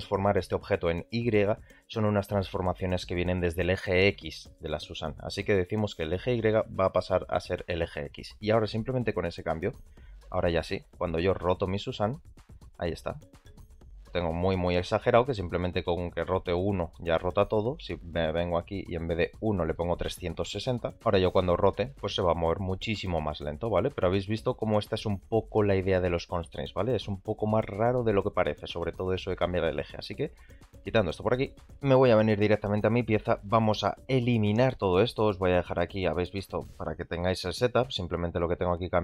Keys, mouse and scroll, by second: 9.3 a, 9.8 r, 11.3 r, 15.8-16.2 middle drag, 19.6-20.9 drag, 21.2 r, 29.8 shift+middle drag, 30.5 click, 31.5 shift+middle click, 31.6 click.